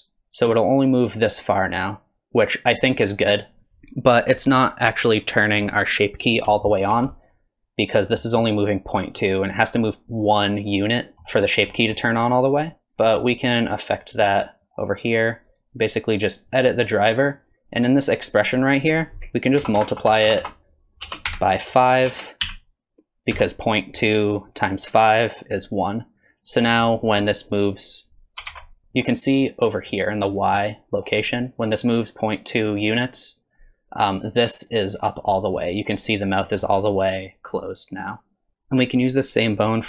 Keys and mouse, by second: 6.9 ctrl+Tab, 7.3 click, 11.1 middle click, 11.8 middle click, 15.6-26.2 drag, 19.8 BackSpace, 19.9 BackSpace, 20.3 BackSpace, 20.4 BackSpace, 26.7 middle drag, 27.3 click, 27.8 click, 28.5 ctrl+Tab, 30.6 middle click, 31.9-33.6 drag, 35.4 middle drag, 36.5 middle drag, 37.9 click.